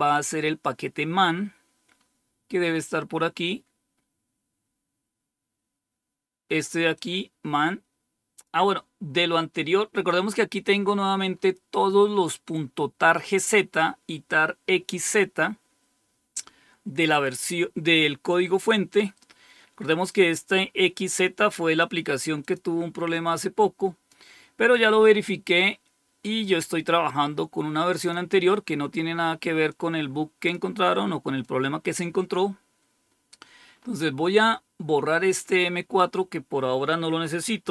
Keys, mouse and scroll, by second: 1.7 scroll up 1, 2.4 scroll up 1, 3.1-3.8 scroll up 1, 6.8-8.4 drag, 9.7-12.0 scroll up 4, 16.9-17.7 scroll down 2, 17.7-19.4 scroll down 1, 19.4-20.0 scroll down 1, 20.0-21.7 drag, 22.3 click, 23.3 click, 26.3-28.0 drag, 29.6 click, 31.3 click, 32.3-33.7 scroll down 1, 33.7-34.5 scroll up 1, 35.9-37.5 scroll down 1, 37.5-37.7 typing, 37.5 scroll down 1.